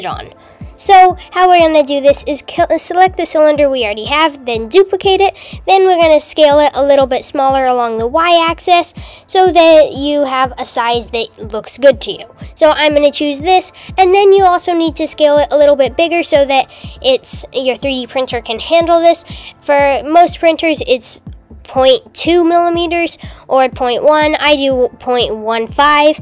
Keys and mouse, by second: 0.4 click, 0.5 click, 3.0 shift+d, 5.4 s, 18.5 s.